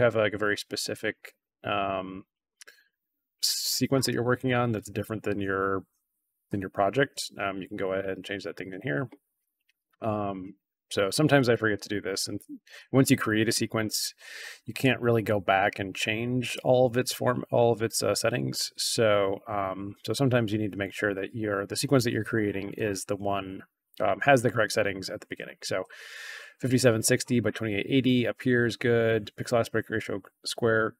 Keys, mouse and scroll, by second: 11.3 click, 14.7 click, 16.4 click.